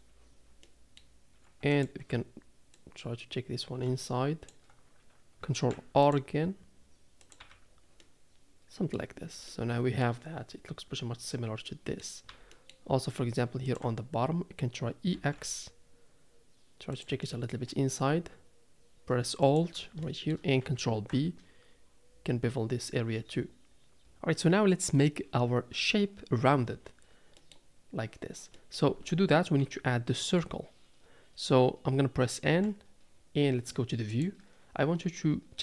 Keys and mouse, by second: 0.7 middle click, 1.7 alt+click, 2.9-4.5 drag, 5.5 ctrl+r, 7.4 Tab, 8.0-9.0 middle drag, 9.5-10.0 middle drag, 11.7-12.0 middle drag, 12.5 Tab, 12.5 middle click, 13.6 alt+click, 15.1 e, 17.3 middle click, 19.5 alt+click, 20.0 shift+middle click, 20.9 ctrl+b, 27.4 middle click, 28.5 middle click, 29.6 KP_3, 32.5 n.